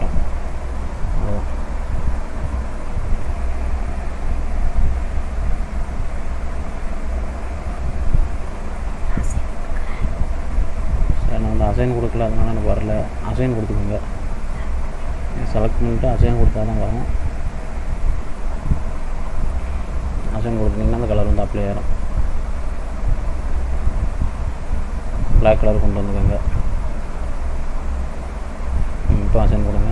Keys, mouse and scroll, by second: 1.4 click, 2.0 middle click, 2.6-3.3 scroll up 2, 3.3 middle click, 5.3 click, 7.8 middle click, 9.2 scroll up 1, 11.7 ctrl+z, 16.9 l, 17.6 l, 19.4 click, 21.4 click, 29.6 click.